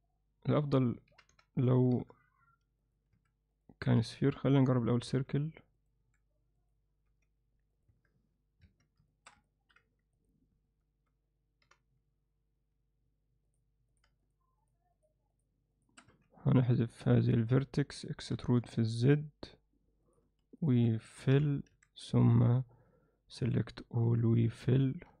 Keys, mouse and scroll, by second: 1.1 r, 3.2 s, 3.9 s, 5.1 g, 6.0 s, 7.1 g, 7.9 Tab, 8.7 1, 9.1 alt+shift+middle click, 9.5 ctrl+alt+middle click, 10.3 click, 18.4 e, 21.8 f, 21.8 a, 24.1 f, 25.1 z.